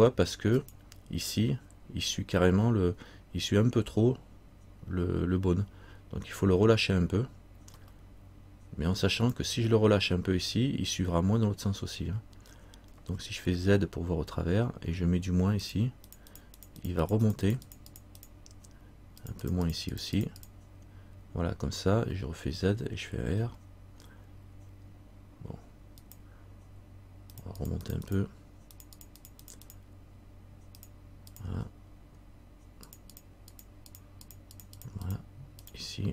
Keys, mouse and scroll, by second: 13.1 z, 15.8 click, 22.2 click, 22.2 z, 23.6 r, 27.5-36.1 click.